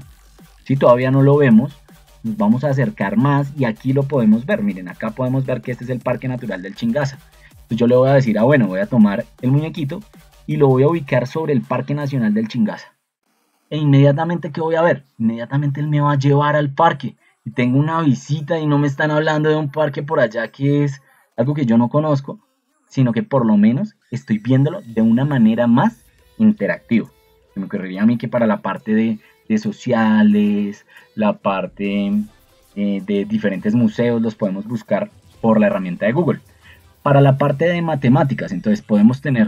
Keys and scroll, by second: 5.0 ctrl+2, 7.4 Escape.